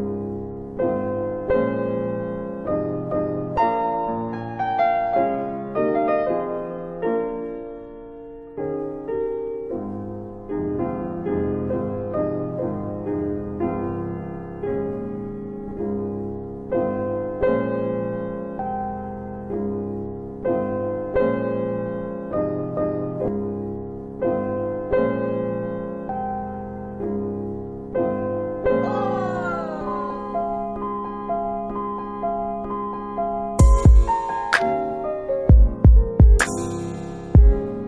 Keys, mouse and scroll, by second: 0.1 alt+click, 1.4 alt+click, 1.7 alt+middle click, 2.1 alt+right click, 2.9 alt+click, 4.9 alt+click, 5.5 alt+right click, 5.9 alt+right click, 6.2 alt+click, 6.6 alt+middle click, 7.0 alt+click, 8.4 alt+right click, 8.7 alt+right click, 9.3 alt+click, 9.6 alt+right click, 9.8 alt+right click, 10.1 alt+middle click, 11.8 click, 17.3 scroll down 1, 18.6 click, 21.5 alt+click, 22.1 alt+right click, 22.5 alt+middle click, 22.8 alt+middle click, 23.2 alt+click, 26.1 alt+click, 26.4 alt+right click, 26.6 alt+right click, 26.9 alt+click, 28.4 alt+click, 29.1 shift+click, 29.7 alt+click, 30.0 alt+click, 31.0 alt+right click, 31.3 alt+right click, 32.2 click, 32.7 alt+click, 32.8 alt+click, 34.3 alt+click, 35.0 alt+click, 35.6 alt+middle click, 36.0 alt+right click, 36.2 alt+right click.